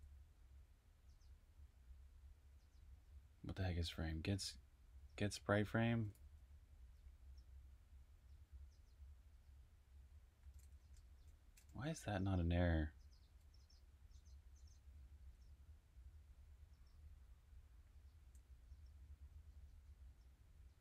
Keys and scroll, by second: 3.6 j, 6.1 k, 10.1-11.6 typing, 14.6-15.3 typing, 16.5-20.8 typing.